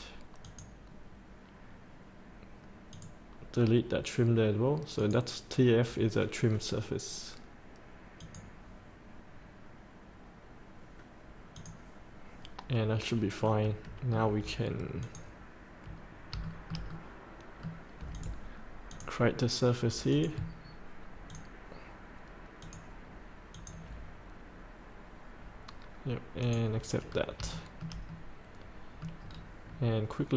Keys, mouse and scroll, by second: 12.8 scroll up 1, 13.4-14.5 middle drag, 15.0 click, 16.6-18.1 shift+middle drag, 18.1 click, 21.2 ctrl+click, 22.6 ctrl+click, 23.5 ctrl+click, 26.4 click, 27.0 scroll up 1, 27.5 shift+middle click, 27.7 shift+middle click, 28.1 middle click, 29.3 scroll down 1.